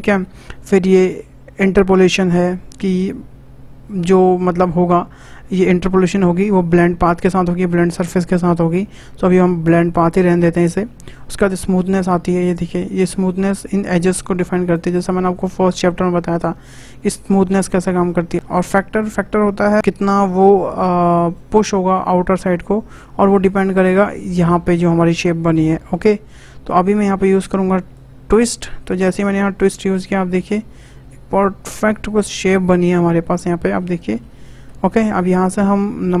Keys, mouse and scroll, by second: 3.8-7.0 drag, 11.7-14.7 drag, 18.3 click, 21.3-23.4 drag, 27.9-30.9 drag, 30.9-32.1 middle drag, 32.1 scroll up 1, 32.4-36.2 shift+middle drag.